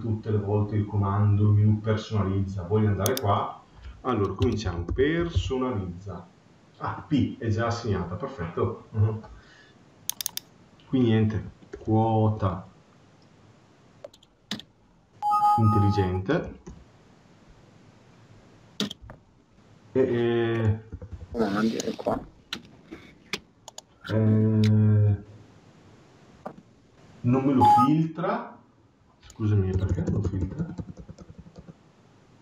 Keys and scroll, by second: 20.8 BackSpace, 29.6 BackSpace.